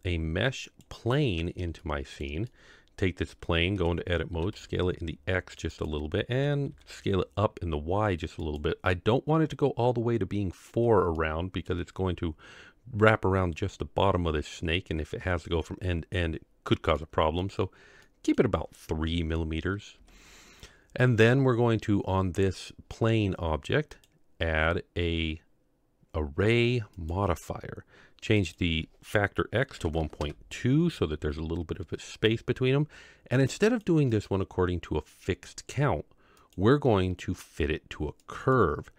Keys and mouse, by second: 1.8-2.2 shift+middle drag, 2.4-3.0 middle drag, 3.7 Tab, 4.3 s, 6.3 s, 11.1-11.6 middle drag, 17.0-17.4 middle drag, 18.0-18.3 middle drag, 20.0 Tab, 23.9-27.1 drag, 28.5-30.2 drag, 33.4 click, 34.2 click, 36.3-38.5 drag.